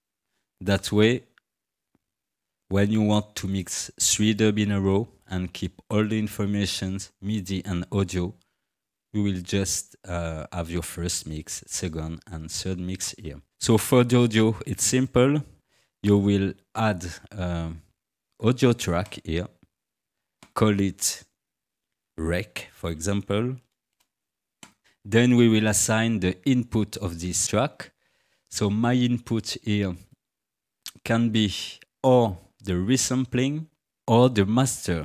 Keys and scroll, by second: 21.8 ctrl+r, 22.2-23.7 typing, 23.9 Return.